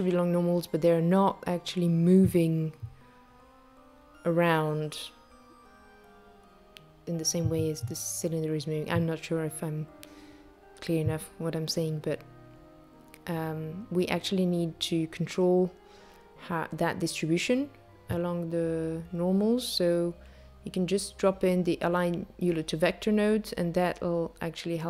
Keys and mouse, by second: 2.9 click, 5.4 click, 22.0 click, 23.0 space.